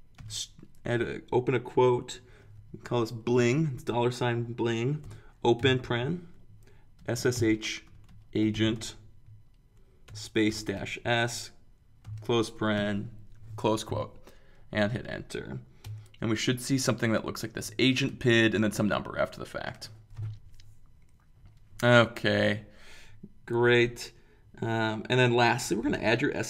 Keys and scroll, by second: 0.2-1.5 typing, 3.2 shift+4, 5.6 typing, 6.7-13.3 typing, 15.8 Return.